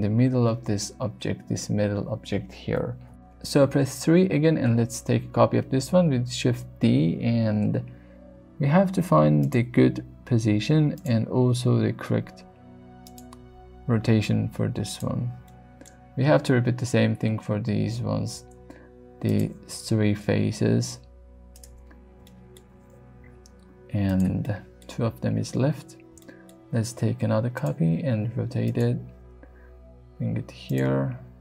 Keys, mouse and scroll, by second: 1.4 KP_3, 2.2 shift+middle click, 2.8 shift+middle click, 3.8 shift+d, 5.5 click, 7.3 r, 9.4 click, 9.9 g, 10.9 click, 11.8 r, 13.0 click, 13.4 g, 14.9 click, 15.5 shift+middle click, 18.4 shift+d, 19.3 click, 19.7 r, 21.5 click, 22.3 shift+middle click, 23.1 g, 24.0 click, 24.4 shift+middle click, 26.2 shift+middle click, 26.8 shift+d, 27.6 click, 27.8 r, 28.7 click, 29.4 g, 30.6 click, 31.1 r.